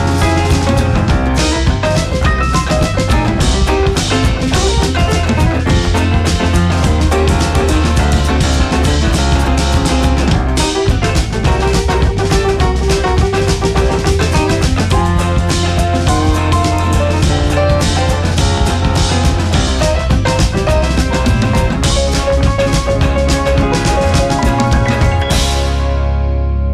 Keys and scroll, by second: 1.7 Right, 1.9 Down, 2.3 Up, 3.9 Up, 5.8 space, 15.9 Delete.